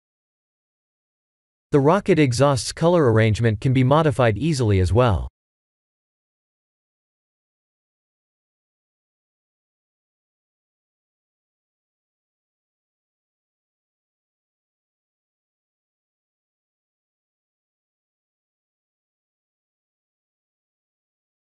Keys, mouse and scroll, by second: 8.1 click, 9.4 shift+middle click, 11.3 middle click, 12.8-14.1 scroll up 13, 14.1-15.9 scroll up 2, 15.9 click, 19.3 click.